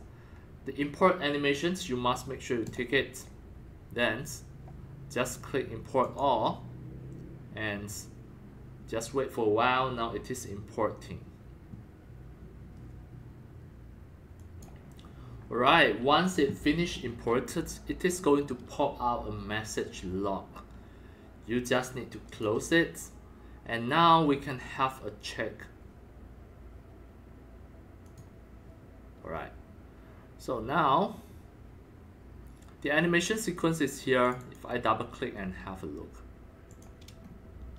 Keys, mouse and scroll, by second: 2.6-5.0 drag, 6.0 click, 6.7 click, 9.7-11.2 drag, 14.3-16.4 drag, 18.5-19.7 drag, 22.3 click, 22.4-23.5 drag, 23.6 click, 24.1-27.6 drag, 28.0 click, 28.1-33.3 drag, 34.2 click, 34.3 click, 36.7 click, 37.2 scroll up 2.